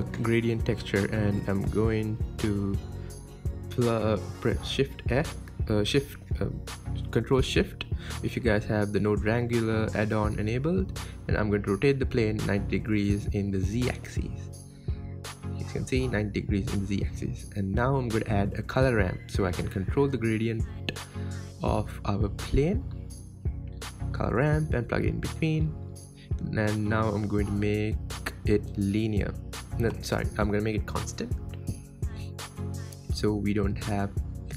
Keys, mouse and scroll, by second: 5.2 x, 7.1 ctrl+shift+click, 13.2 click, 14.4 r, 18.3 n, 20.7 click, 31.1-34.0 drag, 34.0 KP_7.